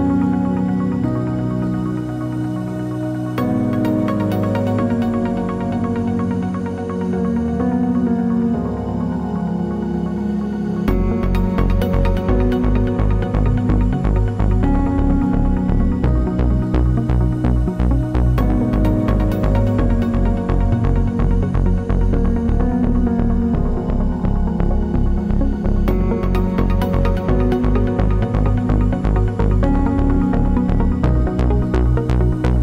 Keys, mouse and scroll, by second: 0.3-1.6 middle drag, 1.6 click, 2.1 g, 2.1 click, 2.4 g, 2.8-5.6 middle drag, 3.4 scroll down 2, 5.6 click, 5.7 g, 6.5 click, 6.6 g, 8.2 click, 8.3 g, 9.8-15.9 middle drag, 10.1 g, 11.5 Tab, 12.5 scroll down 1, 12.9 scroll up 1, 14.9 alt+d, 15.9 r, 16.9 click, 17.1 g, 17.8 click, 17.9 middle click, 18.3 g, 18.8 click, 18.8 middle click, 19.7 g, 20.2-23.8 middle drag, 22.3 scroll down 1, 23.1 r, 23.8 click, 23.9 g, 24.6 click, 24.7-26.6 middle drag, 26.2 g, 26.6 click, 26.7-28.8 middle drag, 28.1 alt+d, 28.8 click, 29.7-30.7 middle drag, 30.0 g, 30.7 click, 30.8-32.1 middle drag, 31.5 g, 32.1 click, 32.3 g.